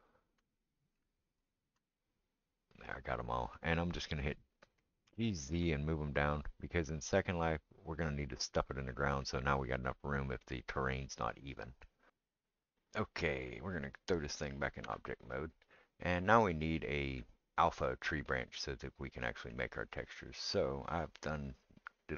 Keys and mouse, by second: 0.0 alt+shift+click, 1.4 alt+shift+click, 5.1 g, 13.3 click, 14.8 Tab.